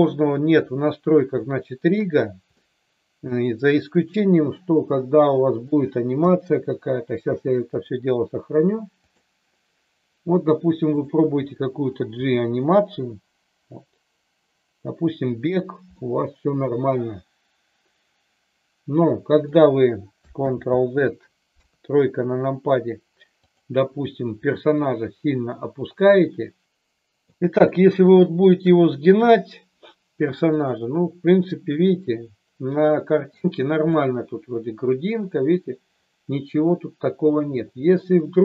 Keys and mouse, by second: 1.4-1.9 shift+middle drag, 2.5-5.6 middle drag, 6.1 KP_3, 7.6-9.3 drag, 10.9 click, 12.2 g, 15.4 click, 15.9-19.4 middle drag, 20.4 ctrl+z, 21.5 KP_3, 23.5 click, 24.9-26.6 drag, 26.6 middle click, 27.6-28.7 shift+middle drag, 30.9 click, 31.8-33.3 middle drag, 33.9-38.4 middle drag.